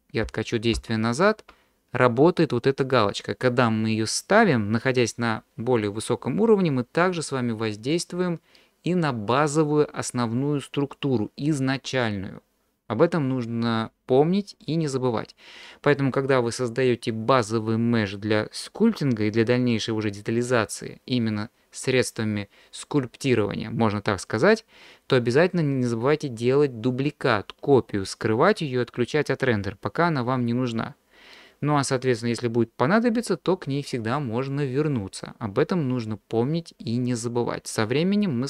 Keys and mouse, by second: 0.2 ctrl+z, 0.8 ctrl+z.